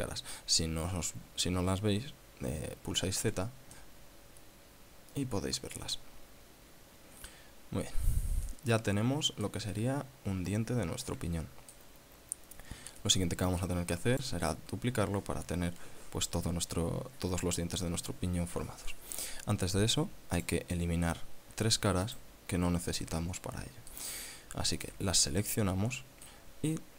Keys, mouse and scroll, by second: 3.8 z, 4.4-8.1 middle drag, 8.5 scroll down 1, 9.0-10.2 middle drag, 10.3-12.5 middle drag, 12.7-13.0 scroll up 1, 13.1-13.4 scroll down 1, 13.6 click, 21.0 click, 22.7 right click, 23.5 shift+right click, 24.0 middle click, 25.4 shift+right click, 25.8-26.9 middle drag.